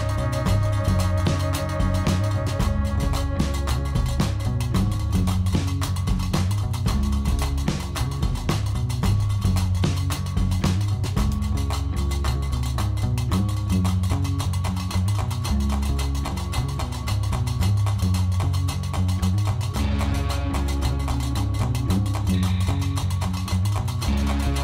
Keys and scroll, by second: 3.8 ., 3.9 3, 4.0 Return, 5.8 ., 5.8 3, 6.0 Return, 6.7 Tab, 8.0 ctrl+r, 11.7 e, 12.0 Escape, 12.3 s, 14.2 alt+a, 15.5 Tab, 16.9 alt+a, 21.0 g, 21.2 x.